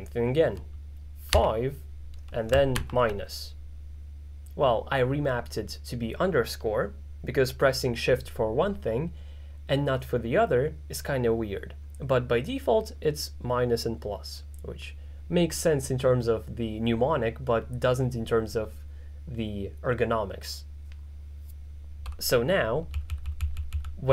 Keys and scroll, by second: 1.4 5, 2.8 shift+-, 23.0-23.7 typing.